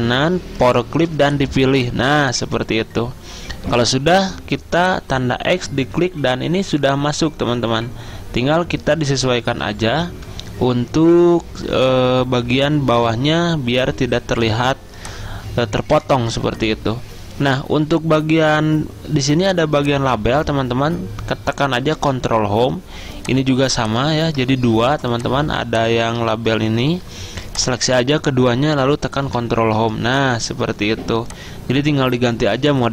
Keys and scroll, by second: 9.8 Down, 10.3 Down, 21.9 ctrl+Home, 24.6 ctrl+z, 26.4 ctrl+z, 29.4 ctrl+Home.